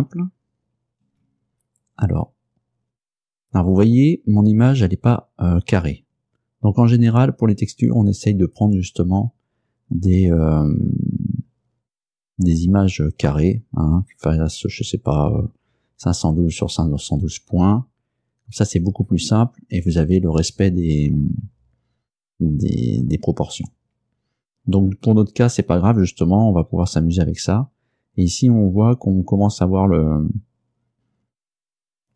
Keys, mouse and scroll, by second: 1.1 Return, 2.2-2.5 scroll down 2, 2.5-11.8 middle drag, 27.6-28.1 scroll up 2, 28.1 scroll down 2.